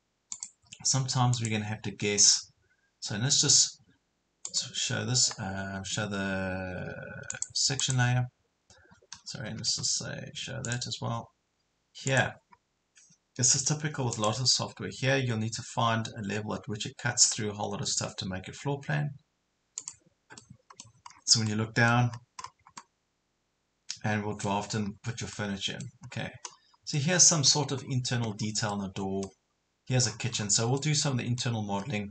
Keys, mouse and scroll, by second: 0.3 click, 9.1 Escape, 10.7 click, 12.6 scroll up 1, 13.6 typing, 14.1-15.1 drag, 20.4 middle click, 21.1 scroll down 1, 21.5 middle click, 22.1 scroll up 1, 22.8-24.9 middle drag, 24.9 scroll up 1, 25.3 middle click, 26.1 scroll up 1, 26.9 middle click, 27.9 scroll down 1, 28.7 middle click, 29.5 scroll up 1, 30.1 scroll down 1, 30.8 middle click, 31.8 scroll down 1.